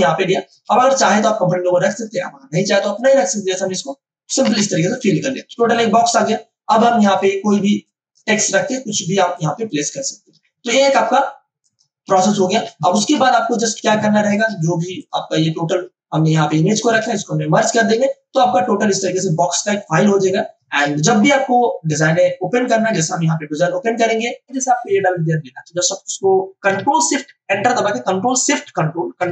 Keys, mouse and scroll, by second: 0.0 space, 0.5 space, 0.6 v, 1.1 click, 4.4 ctrl+BackSpace, 5.6 ctrl+d, 6.8 space, 7.1-12.1 ctrl+drag, 12.7 v, 13.2 space, 13.5 click, 13.7 space, 15.3-15.8 scroll down 1, 16.8 shift+click, 17.6 ctrl+e, 19.1 space, 19.3 click, 19.6 space, 20.2 space, 21.2 ctrl+space, 22.8 ctrl+o, 24.7 click.